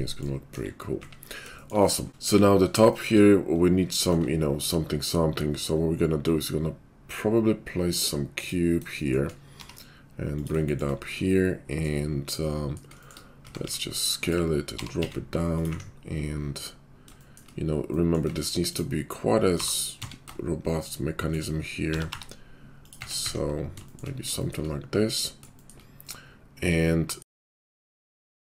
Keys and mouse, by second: 0.5 KP_5, 1.0 `, 2.1 `, 2.2 KP_5, 4.1 shift+a, 9.5 g, 10.5-12.9 shift+middle drag, 12.9 shift+click, 13.1-17.1 middle drag, 13.4 s, 14.8 g, 15.7 `, 17.1 shift+click, 17.2-18.3 shift+middle drag, 18.3 Tab, 19.4 g, 21.9 g, 22.9 Tab, 23.2 `, 24.2-28.5 shift+middle drag, 27.3 `.